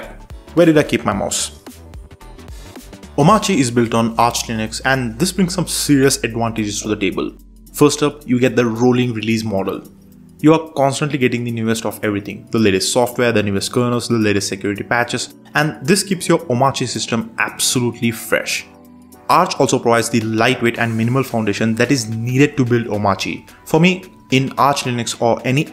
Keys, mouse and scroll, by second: 0.2 Tab, 0.5 Tab, 0.7 Tab, 0.9 Tab, 1.6 Tab, 6.7 super+3, 7.6 super+space, 9.4 super+space, 10.3 alt+super+space, 11.3 Down, 11.4 Down, 11.5 Down, 11.7 Down, 11.9 Down, 12.2 Down, 13.7 Return, 14.9 Down, 15.4 Up, 15.7 Down, 16.1 Up, 16.9 Return, 18.8 Down, 19.3 Up, 19.7 Up, 19.9 Up, 21.2 Up, 21.4 Down, 21.5 Down, 21.7 Down, 21.9 Down.